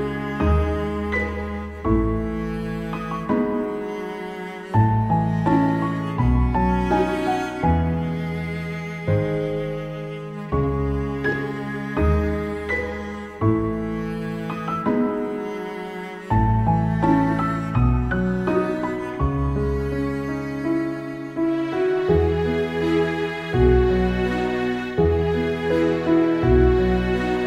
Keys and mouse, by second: 4.5 right click, 7.2 right click, 7.5 ctrl+z, 7.8 ctrl+z, 8.3 ctrl+z, 8.7 ctrl+z, 10.1 ctrl+z, 10.4 ctrl+z, 12.1 ctrl+z, 12.3 ctrl+z, 12.8 ctrl+z, 15.0 ctrl+z, 15.4 ctrl+z, 15.6 ctrl+z, 15.9 ctrl+z, 16.3 ctrl+z, 16.7 ctrl+z, 17.0 ctrl+z, 19.8 ctrl+z, 20.4 ctrl+z, 20.7 ctrl+z, 20.8 ctrl+z, 21.2 ctrl+z, 23.1 ctrl+z, 26.0 ctrl+z, 26.3 ctrl+z, 27.3 ctrl+z.